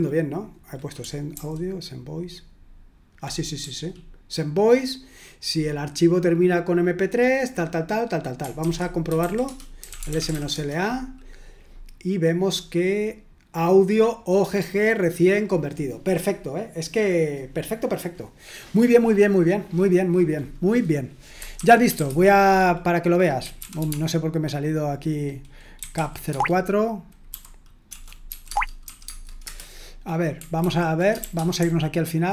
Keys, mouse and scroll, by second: 1.4 ctrl+u, 3.6-5.4 typing, 8.9-11.0 typing, 13.9 click, 14.2 click, 14.8 click, 15.1 click, 21.6-24.3 typing, 25.5-28.9 typing, 28.5 Tab, 29.1 Tab, 29.4 Return, 30.7 ctrl+d, 31.3-32.3 typing.